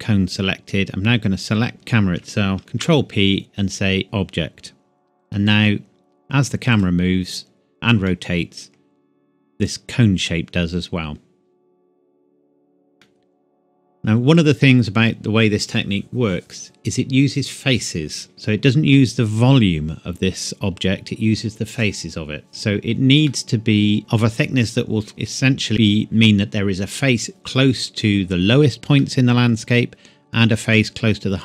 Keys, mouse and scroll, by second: 1.7 shift+click, 2.6 ctrl+p, 4.0 click, 8.1 middle click, 9.1-9.5 scroll down 1, 13.0 middle click, 18.3 middle click, 23.3 middle click, 24.0 scroll down 1, 29.0-29.3 scroll down 1, 29.3 middle click.